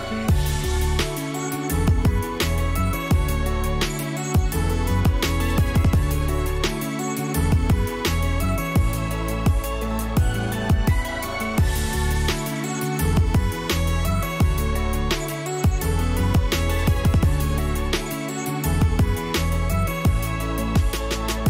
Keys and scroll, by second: 17.4-20.0 typing, 20.1 Return.